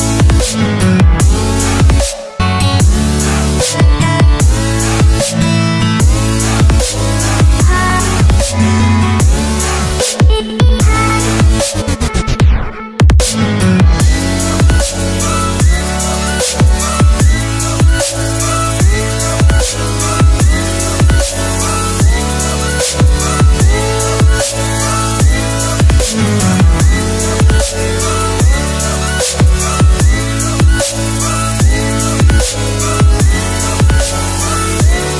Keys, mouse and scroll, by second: 0.8 ctrl+j, 0.8-1.6 typing, 1.5 shift+click, 3.0 Return, 3.3 click, 7.4-8.0 scroll down 1, 8.0-10.6 scroll up 1, 10.6-14.0 scroll down 1, 14.0 click, 14.8-15.2 scroll up 1, 15.7 click, 18.7 ctrl+c, 19.0 click, 19.3 ctrl+v, 20.6 t, 21.3 ctrl+0, 21.9 click, 22.8 ctrl+9, 23.1-23.8 typing, 24.3 click, 27.5 alt+scroll up 1, 28.4 alt+scroll down 1, 28.8 Return, 30.1 click, 30.6 Delete, 32.0 click.